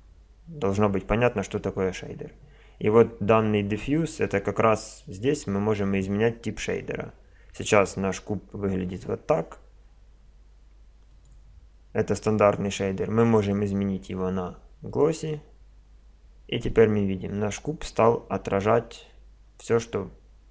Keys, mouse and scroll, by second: 3.9 click, 11.1 click, 12.9 click.